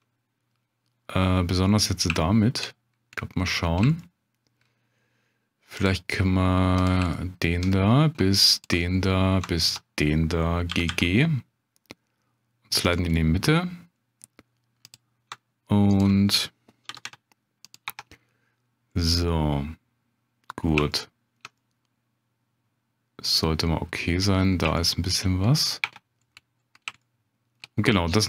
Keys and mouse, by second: 2.2 shift+click, 3.2 click, 4.0 shift+click, 5.8 click, 7.1 shift+click, 8.5 ctrl+click, 9.7 ctrl+click, 10.7 g, 10.9 g, 12.8 click, 13.2 middle click, 14.8 click, 16.0 ctrl+click, 16.9 g, 17.0 g, 17.6 click, 18.9 Tab, 19.3-20.7 drag, 20.9-21.4 shift+drag, 21.6-24.1 drag, 24.8-25.2 shift+drag, 25.8 Tab, 27.0 shift+click.